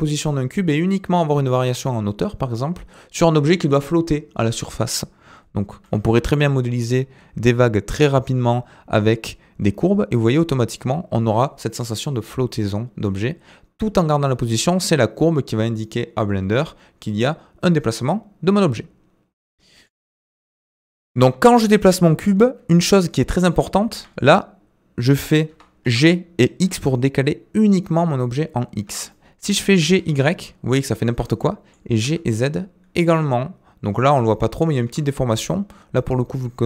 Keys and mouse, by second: 5.8 g, 20.4 middle click, 21.7-22.2 middle drag, 23.2 middle click, 23.9 g, 25.8 g, 29.1-29.5 middle drag, 29.7 g, 31.4-31.7 middle drag, 31.9 g, 35.1 middle click, 36.4-36.6 middle drag.